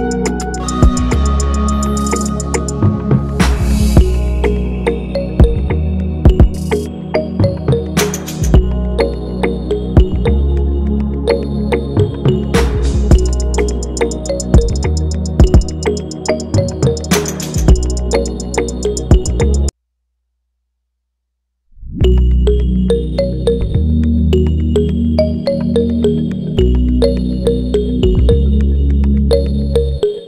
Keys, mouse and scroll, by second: 8.9 double click, 10.6 ctrl+=, 11.4 ctrl+-, 16.8 Return, 19.0 Return.